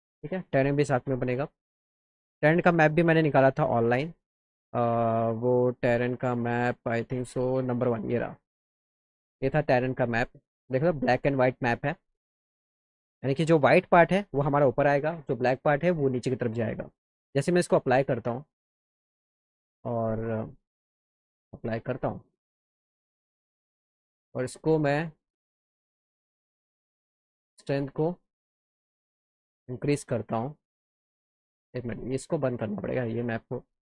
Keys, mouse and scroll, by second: 2.1 click, 3.9 click, 4.1 click, 5.7 click, 6.8 click, 6.9 click, 8.8 click, 12.2 click, 21.4 click, 27.8-29.1 drag, 30.6-31.7 drag, 33.1 click.